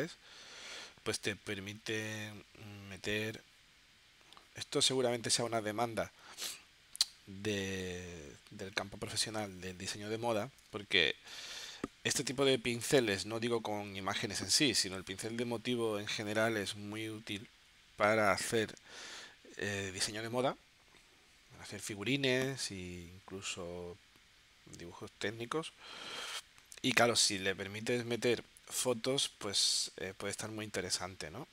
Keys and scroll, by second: 10.7 space.